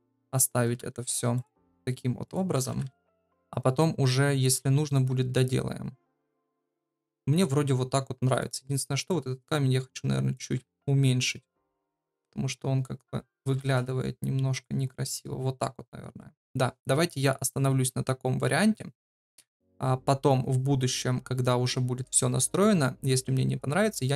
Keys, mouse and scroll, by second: 0.0-3.2 typing, 10.7 s, 13.4 r.